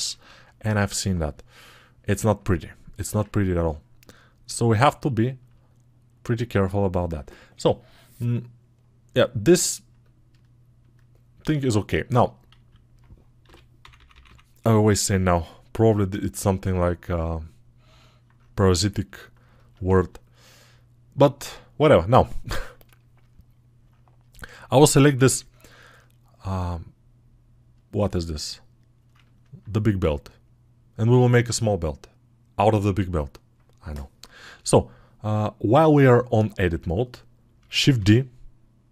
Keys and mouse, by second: 2.4 click, 3.0-5.0 ctrl+alt+right drag, 5.0-6.9 alt+shift+drag, 6.9-9.8 right drag, 9.8-12.8 alt+drag, 12.8-19.6 right drag, 19.6-37.3 alt+shift+drag.